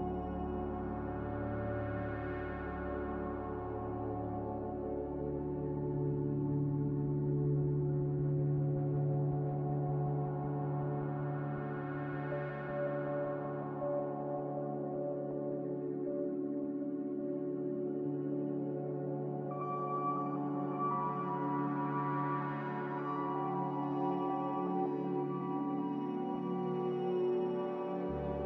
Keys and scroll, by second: 9.4 z, 17.2 b, 18.6 Escape, 25.9 b.